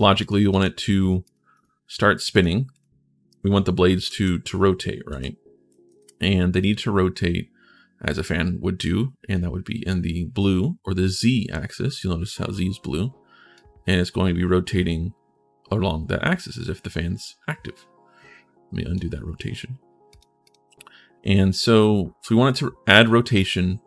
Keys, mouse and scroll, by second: 0.0 click, 0.3 right click, 1.0 right click, 1.3 right click, 2.1 right click, 2.5 right click, 3.1-5.5 right drag, 3.8 a, 4.2 w, 4.9 a, 13.3 click, 18.1 click, 19.8 click, 20.2 click.